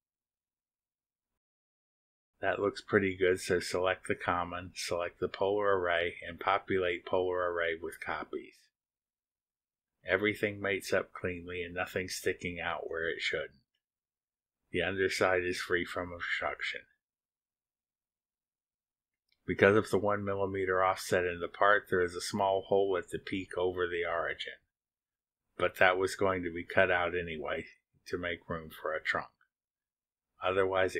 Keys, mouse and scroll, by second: 1.0 click, 3.2 middle click, 3.4-4.7 drag, 3.4-4.7 right drag, 4.7-5.4 scroll up 1, 5.4 scroll down 1, 5.7-6.3 scroll up 1, 7.3 click, 8.4 ctrl+click, 10.7 click, 12.7 click, 13.4 click, 13.7 space, 14.9 click, 14.9 right click, 16.0 scroll up 2, 16.1-16.7 drag, 17.5-18.7 drag, 18.9 scroll up 1, 18.9-19.5 drag, 19.9 click, 20.6 scroll down 2, 20.9 drag, 21.0 8, 22.7 click, 22.8 8, 24.0-27.6 drag, 27.9 scroll down 2, 28.9-30.9 drag.